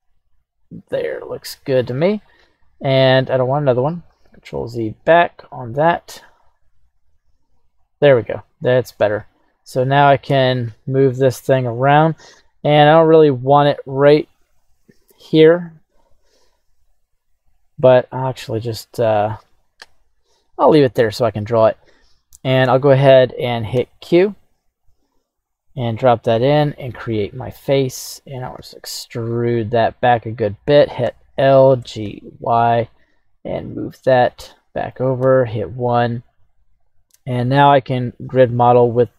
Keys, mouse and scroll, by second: 12.3-15.4 scroll down 1, 25.0-26.9 drag, 27.3 middle click, 27.3 scroll down 1, 28.5 e, 30.1 click, 31.0 l, 31.8 g, 32.0 y, 33.5 click, 33.9 middle click, 35.2 KP_1, 35.8-36.5 scroll up 1, 36.5 scroll up 2, 36.5 right click, 37.4-38.7 middle drag, 38.8-39.1 scroll down 2.